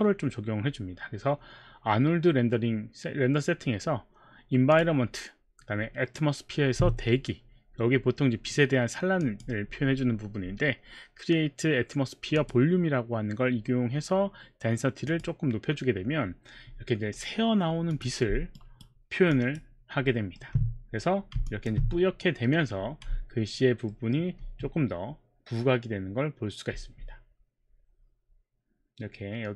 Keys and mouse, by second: 4.7 click, 9.2 click, 12.3 click, 15.1 click, 17.9 click, 18.5 alt+right click, 19.3 alt+click, 20.1 alt+middle click, 23.9 alt+middle click.